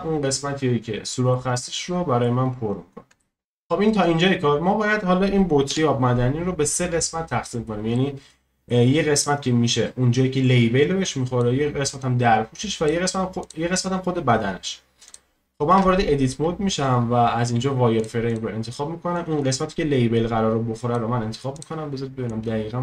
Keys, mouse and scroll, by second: 0.0-1.3 scroll down 2, 1.3-2.4 middle drag, 2.4-3.2 scroll up 1, 3.2-5.1 shift+middle drag, 5.7 KP_1, 6.4-7.9 scroll up 1, 7.9-9.2 shift+middle drag, 9.2-15.8 drag, 15.8 Tab, 17.4 z, 18.3-22.8 drag.